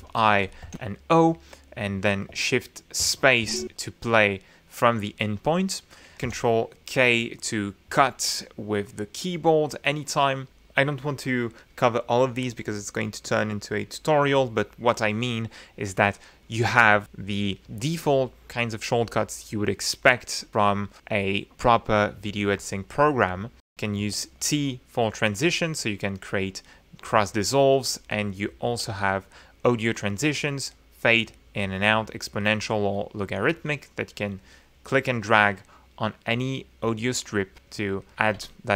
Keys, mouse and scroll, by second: 0.0 i, 0.5 click, 0.7 o, 3.2 shift+space, 6.3 ctrl+k, 7.5 ctrl+z, 24.0 t, 25.3 click, 25.7 click, 27.1 ctrl+z, 27.7 ctrl+right click, 28.6 t, 33.3 click, 34.2-35.5 drag.